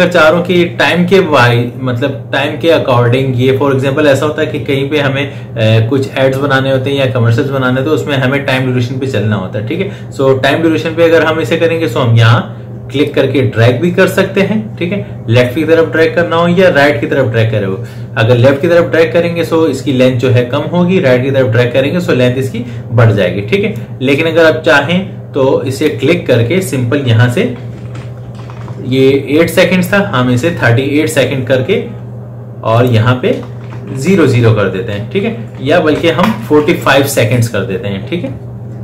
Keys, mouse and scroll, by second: 12.9-22.9 drag, 25.6 click, 27.1 Right, 27.4 Left, 32.6 click, 33.3 BackSpace, 35.0 Left, 35.8 BackSpace.